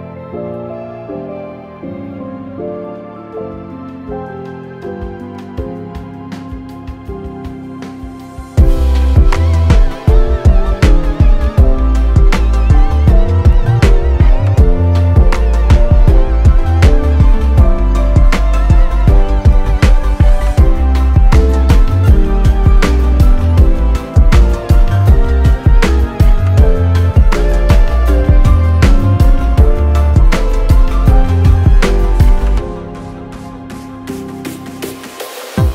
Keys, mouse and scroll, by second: 0.2 middle click, 1.0 middle click, 3.1 F4, 3.8 F4, 13.5 middle click, 14.2 alt+q, 14.6 scroll down 1, 14.8 shift+middle click, 15.0 middle click, 15.4 Tab, 15.8 a, 16.2 u, 19.3 click, 20.2 r, 21.8 middle click, 22.9 s, 24.5 middle click, 24.9 Tab, 25.3 alt+q, 26.4 shift+middle click, 27.1 middle click, 28.9 shift+middle click, 30.2 click, 31.5 middle click, 32.3 click, 33.8 o, 34.7 click.